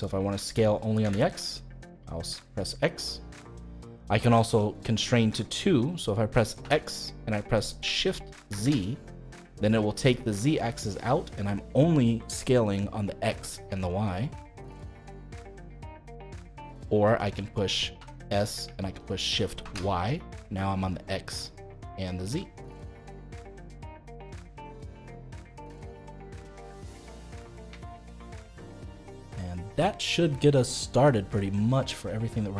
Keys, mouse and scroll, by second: 6.6 s, 17.9 s, 24.5-25.6 middle drag, 25.6 scroll up 1, 25.9-27.2 middle drag, 27.2-27.5 scroll down 2, 27.5-32.5 shift+middle drag.